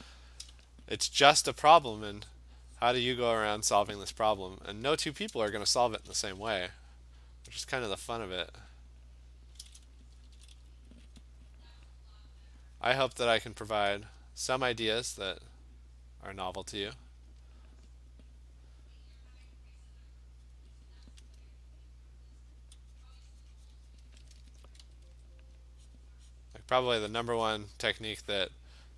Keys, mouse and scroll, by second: 1.6 alt+click, 2.0 click, 2.3 click, 2.4-3.8 alt+click, 2.8 click, 3.2 click, 3.5 click, 3.7 click, 5.9 click, 7.6 alt+click, 8.3 click, 8.6 click, 8.8 click, 8.8 alt+click, 9.2 click, 10.1 alt+click, 10.1 [, 10.3 [, 10.5 [, 11.2 click, 11.5 click, 12.6 click, 12.7 click, 12.8 click, 13.8 click, 14.5 alt+click, 14.7 alt+click, 15.1 click, 15.7 click, 16.9 click, 17.3 click, 17.8 click, 18.8 click, 19.2 click, 20.5 click, 20.9 click, 21.4 click, 24.0 click, 24.8 ], 25.1 ], 25.6 click, 26.0 click, 26.4 click, 26.7 click, 26.9 [, 27.2 [, 27.4 [, 27.7 [, 28.4 click, 28.6 click.